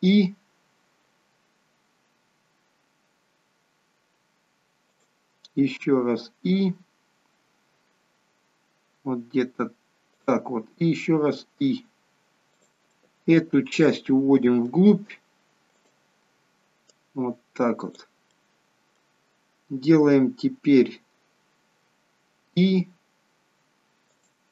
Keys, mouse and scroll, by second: 5.8 i, 11.2 i, 12.8 middle click, 15.7 click, 16.8 click, 18.2 middle click, 19.6 scroll up 2, 22.4 i.